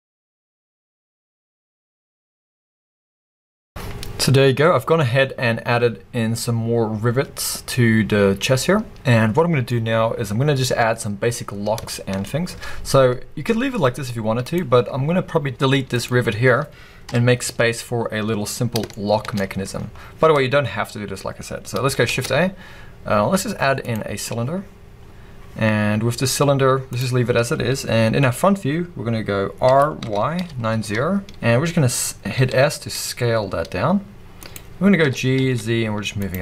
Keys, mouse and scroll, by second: 0.0-2.4 typing, 0.0 click, 1.4 click, 2.3 Return, 3.0-14.4 middle drag, 3.1 ctrl+s, 3.2 scroll down 2, 3.3 scroll up 2, 3.6-4.6 scroll down 2, 4.6 scroll down 1, 11.4-11.9 scroll up 2, 12.3-14.4 scroll up 2, 14.4 click, 15.0 scroll up 2, 15.5 x, 17.0 KP_1, 18.6 scroll up 2, 18.9-26.9 shift+middle drag, 19.4-19.8 scroll up 2, 19.8-21.4 scroll down 2, 21.4-22.1 scroll up 2, 22.1 shift+a, 26.9-31.3 drag, 29.7 r, 31.3 Return, 31.6-32.4 scroll up 2, 32.4 s, 34.5 click, 35.4 g, 36.3 click.